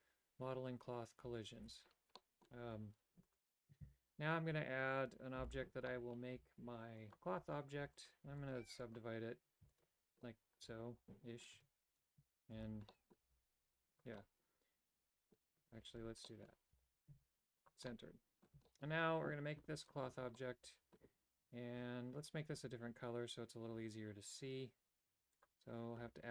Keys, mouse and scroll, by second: 1.6 alt+g, 2.2 middle click, 2.7 g, 3.9 shift+a, 5.5 Tab, 5.9 middle click, 6.4 w, 7.5 click, 7.9 w, 8.3 w, 8.7 w, 9.6 w, 10.3-11.5 middle drag, 11.6 Tab, 12.6 alt+g, 12.9 middle click, 13.3 g, 14.2-15.4 drag, 16.0 alt+g, 16.3 click, 16.8 g, 17.9 middle click, 18.7 shift+middle click, 20.0 click, 20.4 middle click, 22.2 right click.